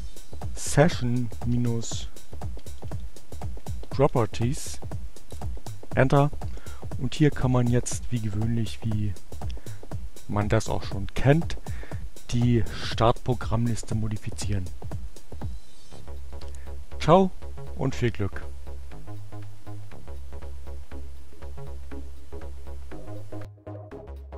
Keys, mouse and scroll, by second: 0.3-1.7 typing, 3.1-4.0 typing, 11.0-11.9 drag, 13.5-15.6 drag.